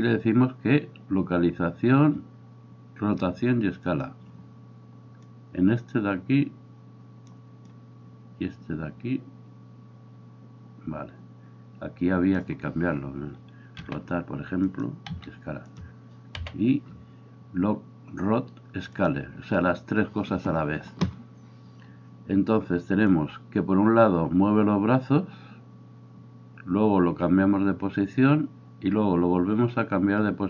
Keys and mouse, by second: 5.2-14.8 drag, 13.8 r, 14.8-23.1 middle drag, 15.1 s, 16.5 i, 23.1-30.4 drag.